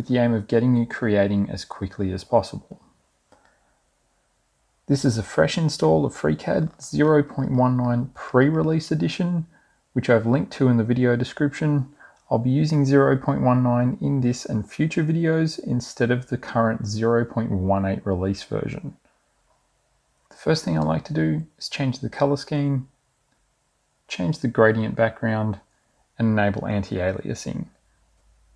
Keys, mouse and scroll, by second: 20.3 click, 21.1 scroll up 2, 22.1 scroll up 2, 23.2 click, 23.9 click, 25.6 click, 26.2 click, 26.4 click, 26.8 click, 27.5 click.